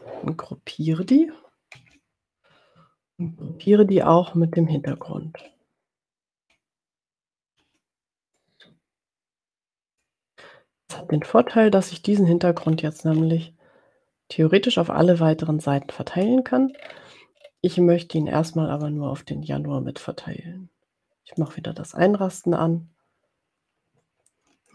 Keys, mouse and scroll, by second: 1.8 ctrl+g, 4.8 shift+click, 7.6 ctrl+g, 8.6-10.5 drag, 12.7-13.6 ctrl+scroll down 4, 16.8-17.1 ctrl+scroll up 2, 17.7 ctrl+scroll up 2, 21.4 click.